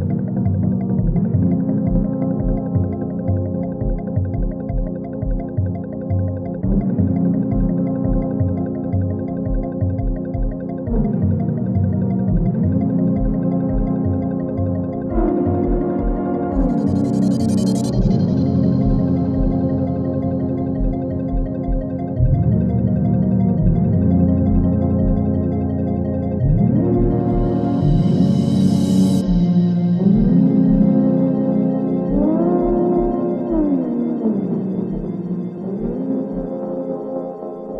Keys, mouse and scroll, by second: 4.5 s, 5.1-8.9 drag, 8.9 ctrl+z, 9.4-9.9 alt+scroll up 1, 10.0-12.8 drag, 14.0 Return, 14.6-16.0 scroll down 1, 16.4 alt+scroll up 1, 16.6-19.6 drag, 23.4-25.0 drag, 25.0 Right, 26.9 Down, 27.9 click.